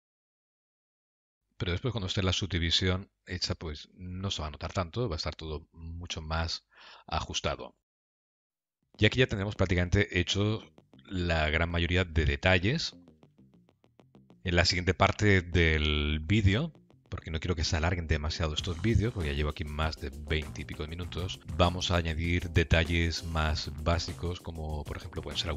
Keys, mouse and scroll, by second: 0.4 click, 0.6 g, 1.2 click, 1.3 g, 4.8 middle click, 8.5 Tab, 8.6-9.1 scroll down 4, 8.7 middle click, 14.5 shift+middle click, 15.0 middle click, 16.7 shift+middle click, 20.3 shift+middle click, 21.5 middle click.